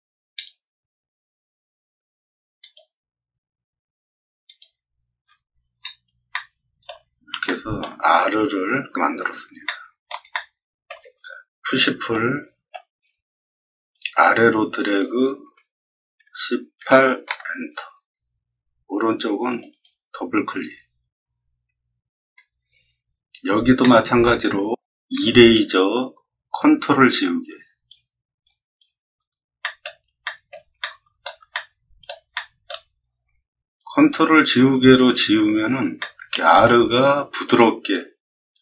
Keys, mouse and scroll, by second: 0.3 click, 2.5 click, 4.4 click, 5.2 scroll down 2, 5.7 middle click, 6.2-6.8 shift+middle drag, 7.4-7.7 shift+middle drag, 8.8 scroll up 2, 9.2 middle click, 9.6-10.0 shift+middle drag, 10.3-10.8 middle drag, 12.0 p, 12.6 p, 13.9-14.9 drag, 16.2 1, 16.7 8, 17.2 Return, 19.4 click, 19.6 click, 22.9 middle click, 23.0 middle click, 23.0 middle click, 23.1 middle click, 23.2 middle click, 23.8 middle click, 27.4 ctrl+click, 28.4 ctrl+click, 29.6 middle click, 30.2 middle drag, 30.7 shift+middle click, 31.5 middle click, 32.3-32.6 shift+middle drag, 33.7-34.0 ctrl+drag, 34.7 ctrl+click, 35.9 middle click, 37.5 shift+click, 38.5 shift+click.